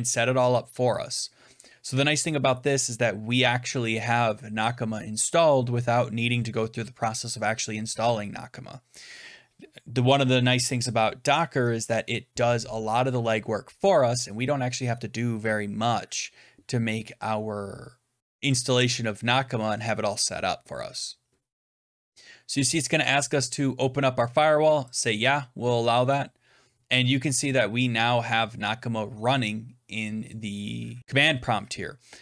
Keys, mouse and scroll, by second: 23.1 click, 24.9 click, 29.8 click.